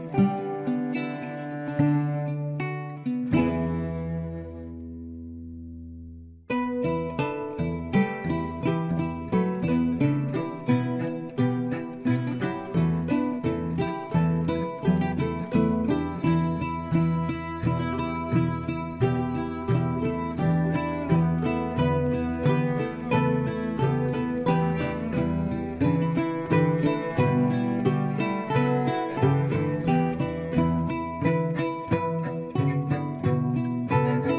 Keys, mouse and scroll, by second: 4.8 g, 7.9 Tab, 9.1 shift+z, 9.8-11.8 scroll down 4, 11.8-12.2 scroll down 1, 12.2-13.5 middle drag, 13.5-14.8 scroll up 5, 14.8-16.1 middle drag, 16.1 scroll down 2, 16.4 Tab, 16.9 middle click, 17.8-18.3 scroll up 2, 18.3-20.4 middle drag, 20.4 ctrl+r, 22.8 Tab, 23.4-23.9 scroll down 3, 23.9-27.4 middle drag, 27.4-28.0 scroll down 1, 28.0-28.4 scroll down 1, 28.4 KP_1, 29.6-31.0 scroll up 3, 31.0-31.9 scroll up 3, 32.2 Tab.